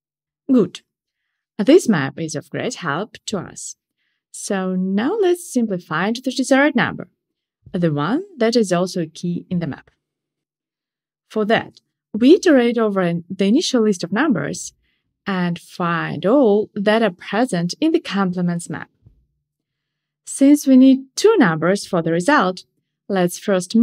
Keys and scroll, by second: 22.2 Return.